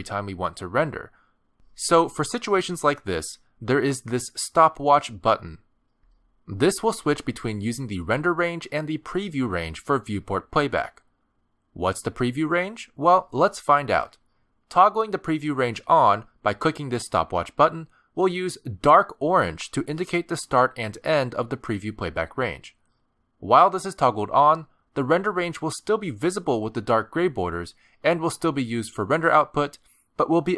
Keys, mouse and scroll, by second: 2.9 click, 15.1 click, 23.8 click, 27.9 click.